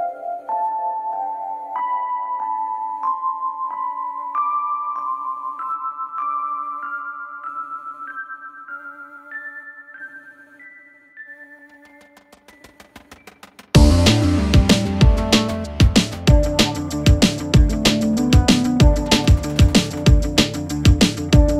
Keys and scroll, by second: 8.2 ctrl+v, 17.4 Delete.